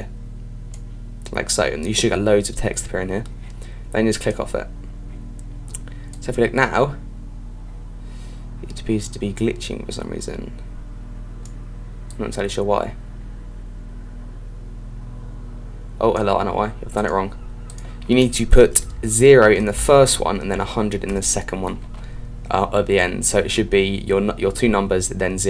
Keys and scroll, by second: 20.0 Right.